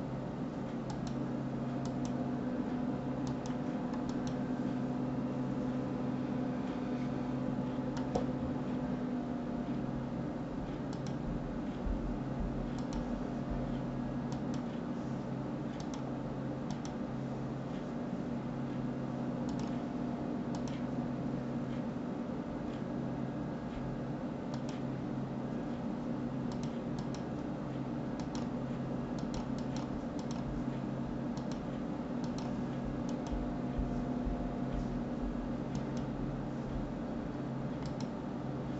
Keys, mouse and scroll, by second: 0.9 click, 1.8 click, 3.2-4.2 drag, 7.9 click, 10.9 click, 12.7 click, 15.8-18.8 drag, 19.5 click, 20.5 click, 24.5-27.6 drag, 31.4 click, 32.2 click, 35.7 click, 37.8-38.7 drag.